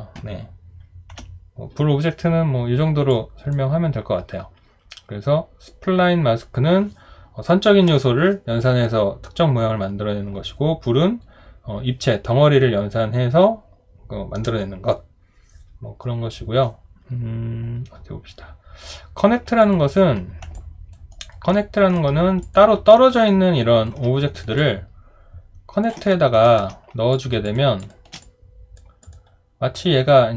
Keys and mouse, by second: 1.1 Delete, 20.5 alt+click, 21.1 alt+right click, 21.5 alt+middle click, 23.3 alt+right click, 24.6 ctrl+click, 26.1 alt+middle click, 27.4 shift+click, 27.8 shift+click.